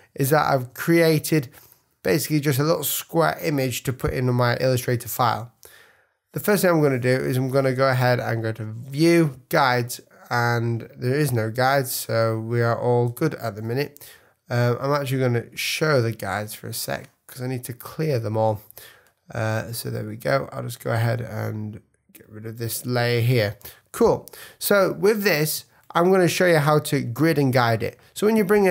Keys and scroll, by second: 3.9 super+-, 4.9 super+=, 11.5 super+;, 13.0 super+;, 24.4 super+=, 24.8 super+space.